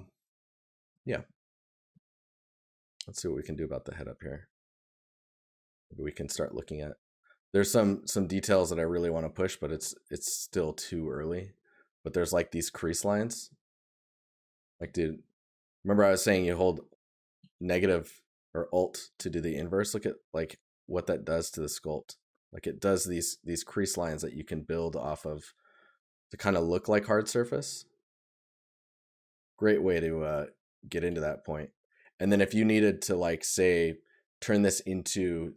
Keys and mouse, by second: 13.8 right click, 25.2 right click, 28.2 right click, 31.2 right click.